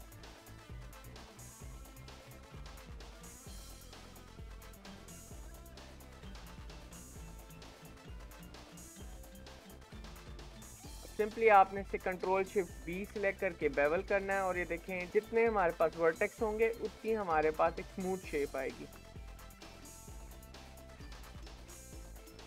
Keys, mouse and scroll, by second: 2.4 scroll down 4, 2.9 middle click, 3.8 scroll up 2, 4.0-6.2 middle drag, 6.2 KP_7, 7.0 shift+middle click, 7.5 alt+z, 8.4-10.0 shift+middle drag, 10.0-11.5 scroll up 8, 10.5 shift+middle click, 11.5-12.8 drag, 12.8 ctrl+shift+b, 15.0 click, 15.6 ctrl+shift+b, 18.5 shift+middle click, 19.2 click, 19.9 ctrl+shift+b, 21.1 shift+middle click, 21.5 click, 21.9 ctrl+shift+b.